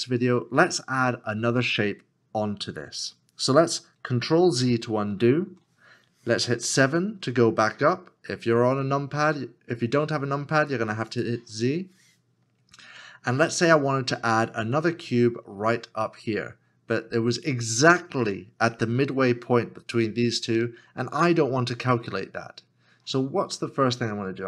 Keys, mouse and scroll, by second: 4.3 f, 5.2 ctrl+z.